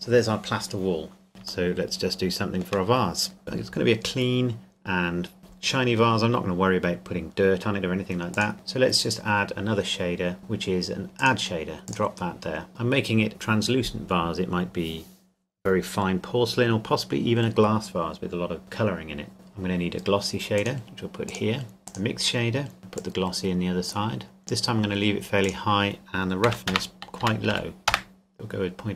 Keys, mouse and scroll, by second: 1.3 shift+click, 1.9 shift+middle click, 3.4 right click, 8.3 click, 11.2 click, 19.3 click, 20.6 click, 24.4 middle click, 25.4 click, 26.7 KP_0, 27.2 KP_2, 27.5 KP_5, 28.0 KP_Enter.